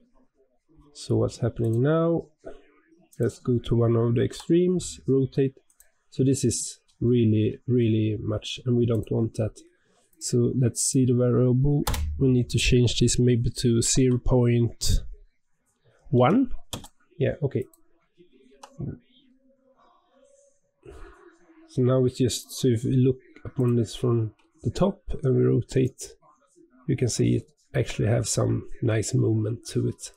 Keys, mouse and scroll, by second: 1.5 click, 1.8-3.0 scroll down 2, 3.0 click, 4.1 r, 6.3 scroll up 2, 7.0-8.8 shift+middle drag, 8.8 click, 10.0-13.2 drag, 16.8 click, 17.5 click, 18.4 r, 23.5 click, 25.7-28.7 drag.